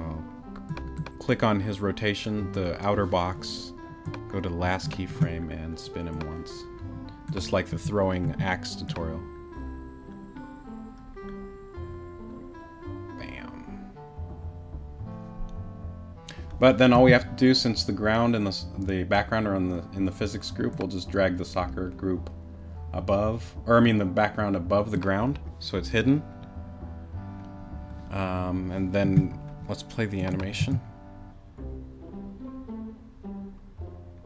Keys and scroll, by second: 30.6 space.